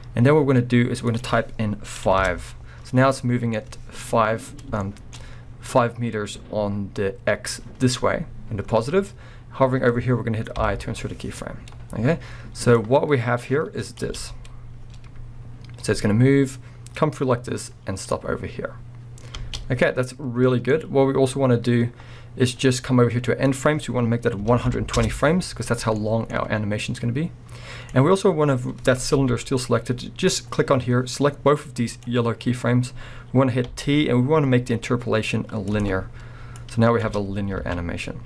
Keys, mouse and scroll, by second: 2.3 Return, 3.1 scroll down 1, 3.5-12.8 middle drag, 4.1-4.8 scroll up 2, 11.6-12.8 scroll down 2, 12.8-19.9 drag, 14.1 space, 14.9 scroll up 2, 19.4 space, 19.9-23.5 middle drag, 20.9-22.6 scroll up 2, 22.6-23.5 scroll up 1, 23.5-26.0 drag, 25.0 Return, 26.0 middle click, 27.0-29.6 drag, 29.2 g, 29.6 right click, 30.3-35.0 drag, 33.7 t, 36.6 click, 37.0 space, 37.3-38.2 alt+drag, 37.8 scroll up 2.